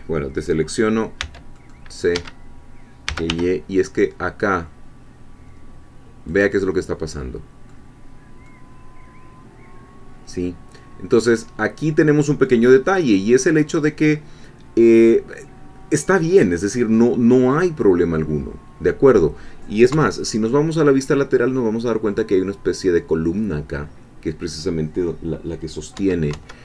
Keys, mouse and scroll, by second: 1.2 c, 1.6 middle click, 2.2 Escape, 2.8-3.8 typing, 6.3 click, 6.8-8.0 middle drag, 8.0 scroll down 1, 8.4-12.6 middle drag, 12.8-13.3 scroll down 1, 13.3-16.9 middle drag, 17.0-19.2 middle drag, 19.2-19.9 scroll up 2, 19.9 3, 26.3 KP_1.